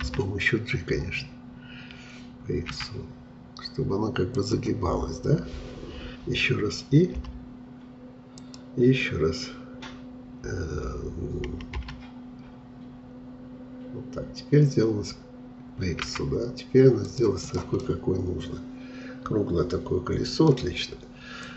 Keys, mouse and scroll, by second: 0.1 g, 11.8 g, 17.5 click, 17.9-20.8 middle drag.